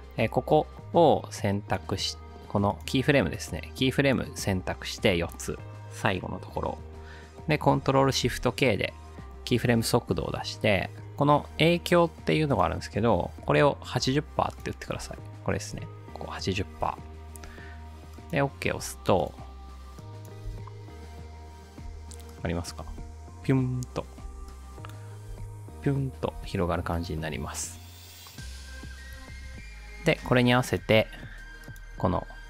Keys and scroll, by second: 8.3 ctrl+shift+k, 13.3-14.0 typing, 16.9-17.7 typing, 20.5 ctrl+alt+space, 22.9 space, 24.3 space, 25.3 space.